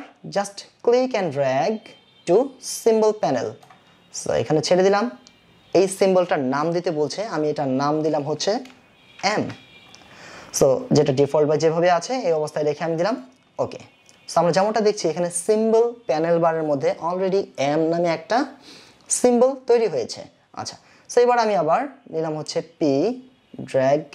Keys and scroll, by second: 10.9 shift+m.